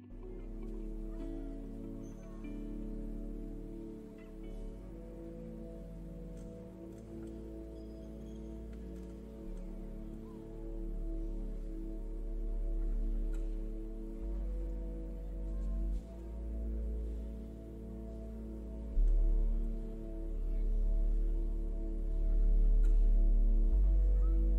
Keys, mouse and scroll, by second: 6.4-6.7 scroll down 1, 6.7 middle click, 8.0 click, 8.4 middle click, 15.4 click, 17.1 shift+click, 18.7 ctrl+l.